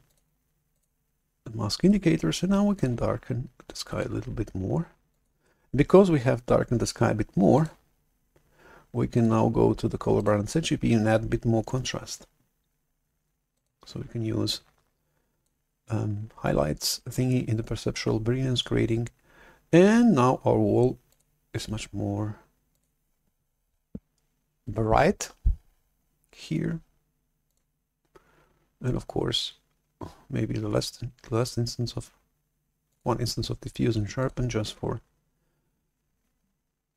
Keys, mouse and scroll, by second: 0.0-1.8 drag, 1.8-2.6 scroll up 2, 2.6 click, 5.0-8.3 drag, 9.1-12.6 drag, 13.5-17.8 drag, 21.0 click, 27.5 click, 34.1 click.